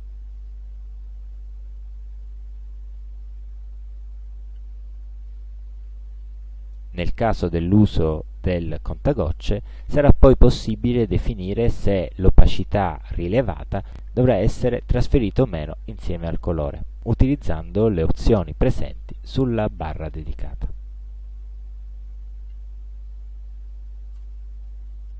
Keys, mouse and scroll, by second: 0.5 click, 24.2 space.